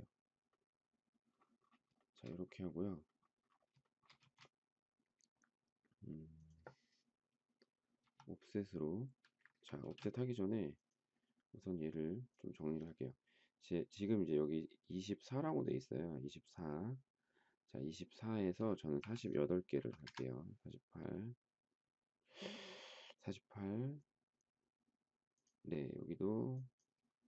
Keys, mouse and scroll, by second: 1.9 shift+middle click, 3.8 shift+middle click, 4.2 space, 9.3 Escape, 9.8 space, 18.9 4, 19.5 8, 19.8 Return.